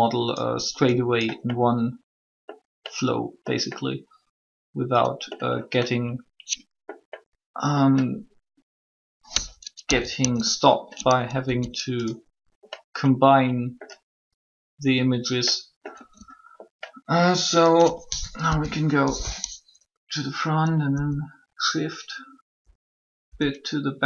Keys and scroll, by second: 9.7 typing, 11.4 s, 18.2 1, 20.6 6, 23.1 6.